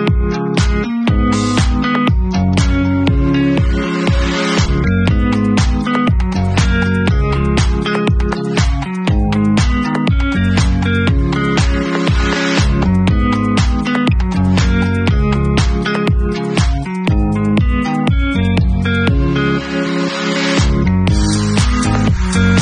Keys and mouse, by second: 0.2 shift+click, 0.2 shift+middle click, 0.8-3.9 alt+drag, 3.1 ctrl+e, 3.9 alt+middle click, 4.3-10.9 alt+drag, 9.5 shift+d, 10.9-14.0 middle drag, 11.4 p, 12.3 Tab, 13.2 ctrl+super+r, 13.3 ctrl+super+y, 14.0 click, 14.6 alt+middle click, 14.7-16.6 alt+drag, 17.0 Tab, 17.4 click, 18.7 Delete, 19.8-21.2 drag, 21.2 alt+middle click, 21.3-22.6 alt+drag.